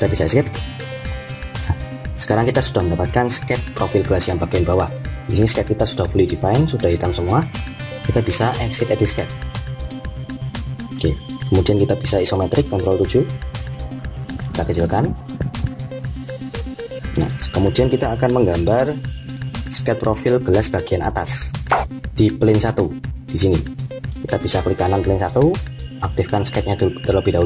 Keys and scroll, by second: 0.1 Escape, 12.7 7.